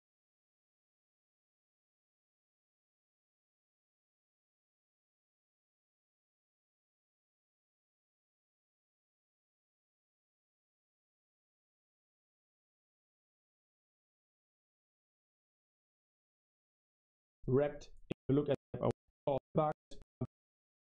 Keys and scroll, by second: 0.0-2.3 typing, 5.0-12.6 typing, 12.8 super+1, 17.2 space, 18.0 Right, 18.4 Right, 18.8 Right, 19.2-20.9 typing.